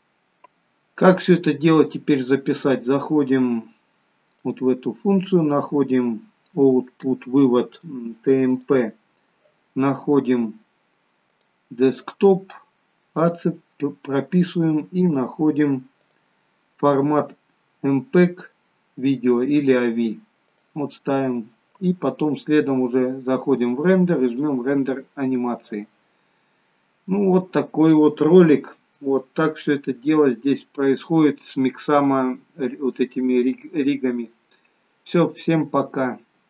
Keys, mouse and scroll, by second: 4.5 click, 8.5 click, 13.9-14.7 scroll down 3, 14.7-15.1 scroll down 3, 16.0 click, 23.6 click, 26.7-29.0 scroll down 3.